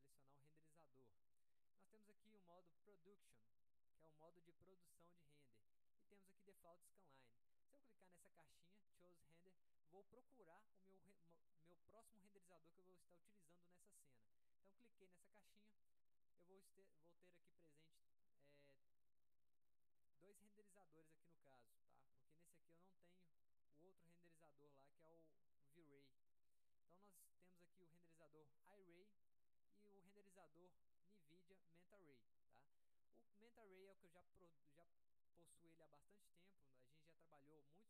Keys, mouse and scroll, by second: 0.1 click, 16.4-17.3 drag, 22.4-22.8 drag, 28.8 click, 30.4 click.